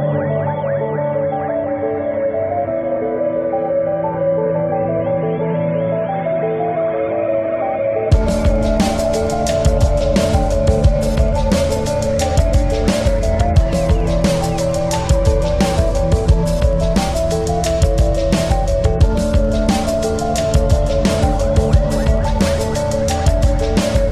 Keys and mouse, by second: 0.2 click, 0.2 typing, 1.5 click, 1.5 typing, 3.2 click, 3.2 typing, 5.6 click, 5.6 typing, 6.8-7.3 typing, 6.9 click, 9.0 ctrl+-, 9.5 space, 10.3 space, 11.1 click, 12.1 ctrl+=, 12.3 typing, 16.5 click, 16.5 typing, 17.6 click, 17.6 typing, 19.6 click, 19.6 typing, 21.1 click, 23.1 ctrl+=, 23.5 typing.